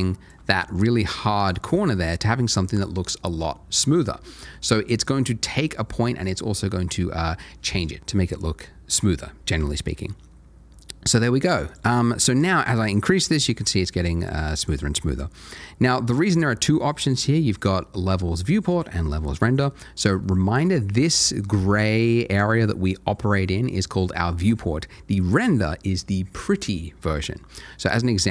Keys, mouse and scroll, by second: 0.6 c, 0.6 a, 0.7 shift+click, 1.7 ctrl+shift+a, 11.7 click, 14.6 double click, 19.8-20.1 scroll down 1, 20.2 shift+middle click, 27.8 click.